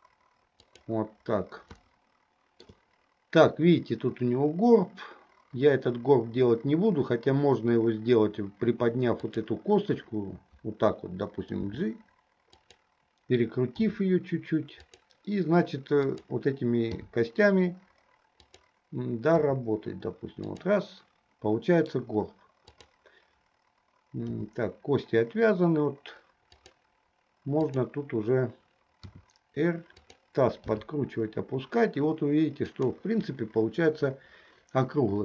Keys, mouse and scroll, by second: 2.1-2.9 shift+middle drag, 9.2 click, 11.7 g, 14.1 r, 16.3 click, 17.1 g, 19.6 r, 22.7-23.1 drag, 24.4 g, 27.9 click, 29.4 r, 30.9 g.